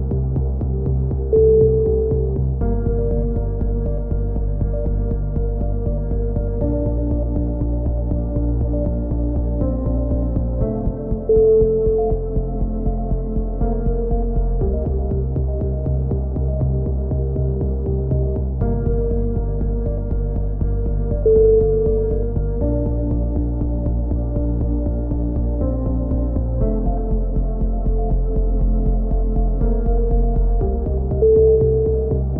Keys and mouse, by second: 0.0 click, 4.9 click, 5.6-6.7 middle drag, 6.7 z, 7.7 click, 11.6-13.4 drag, 15.1 a, 15.2 z, 15.6 Tab, 15.8 middle click, 16.3 click, 17.5-18.7 drag, 20.2 Tab, 20.5 click, 24.9 click, 25.5-27.0 middle drag, 27.0 click, 27.0 x, 27.9-29.4 middle drag, 28.4 ctrl+z, 28.7 x, 29.4 click, 30.8 ctrl+l, 31.1 ctrl+n, 31.6 a.